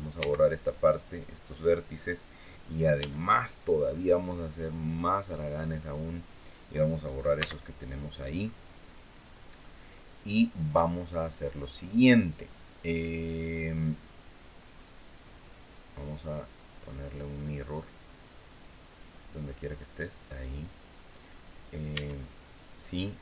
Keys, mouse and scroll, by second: 0.7 click, 2.7 b, 5.0-6.2 drag, 7.1 x, 7.9 click, 16.3 click, 19.5 click, 21.7 Tab.